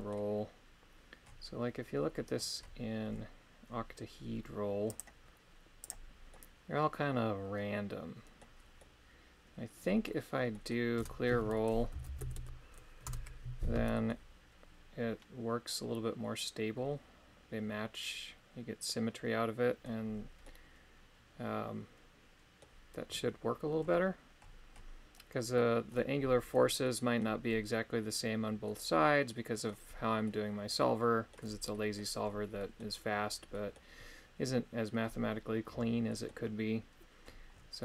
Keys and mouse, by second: 4.9-5.9 drag, 6.3-8.5 middle drag, 8.8-10.0 middle drag, 10.5 middle click, 10.9 space, 14.1-19.8 middle drag, 20.4-22.7 middle drag, 26.9 middle click, 28.6-29.7 middle drag, 30.3-31.4 middle drag, 31.7 middle click, 32.6 middle click, 33.6 middle click, 36.1 middle click.